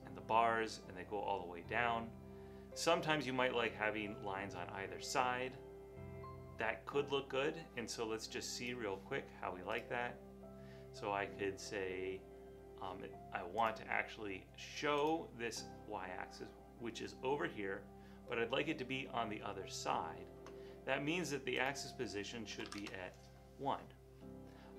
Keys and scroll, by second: 22.6 BackSpace, 22.7 1, 22.8 Return.